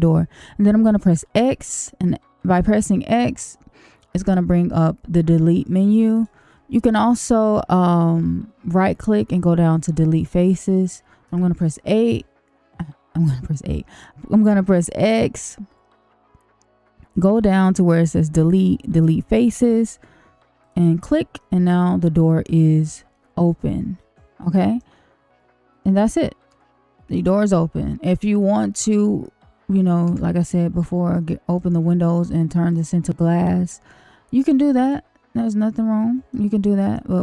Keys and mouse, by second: 1.2 x, 4.1 x, 6.1-10.0 drag, 11.2 x, 21.3-24.7 middle drag, 26.4 Tab, 27.5 middle click, 30.0 Tab, 31.2 click, 32.2 click, 33.2 click, 34.7 click, 36.3 middle click.